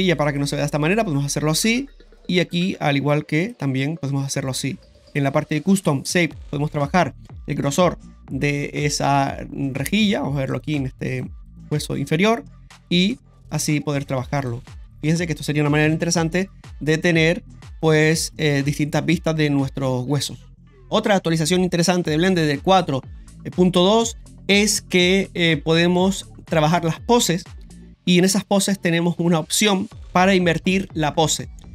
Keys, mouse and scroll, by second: 0.3 click, 2.1 right click, 3.4 click, 4.9 right click, 5.0 click, 6.6-9.9 drag, 10.5 right click, 11.1 right click, 11.5 right click, 12.8-14.5 drag, 14.8 ctrl+z, 14.8 r, 15.1 ctrl+z, 15.8 r.